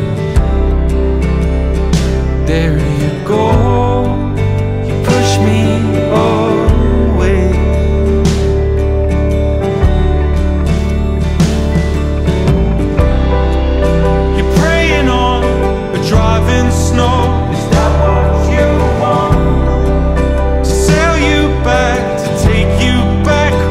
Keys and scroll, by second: 0.1 super+-, 0.9 shift+super+z, 3.0 super+-, 3.1 super+=, 3.4 super+=, 4.6 super+-, 8.5 super+=, 9.4 super+-, 10.8 super+-, 10.9 super+=, 11.7 super+-, 12.5 super+=, 12.7 super+z, 14.0 super+z, 14.3 super+=, 14.4 super+z, 15.0 super+-, 15.6 super+=, 17.2 super+-, 17.8 super+=, 18.7 super+-, 19.2 super+=, 19.9 super+-, 22.1 super+-, 22.7 super+=, 23.4 super+z.